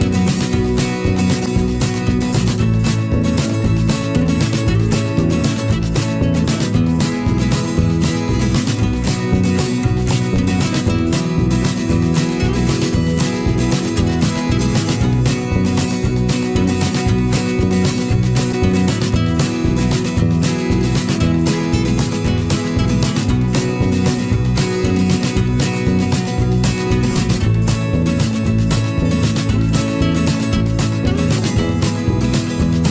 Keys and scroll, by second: 12.2 ctrl+alt+z.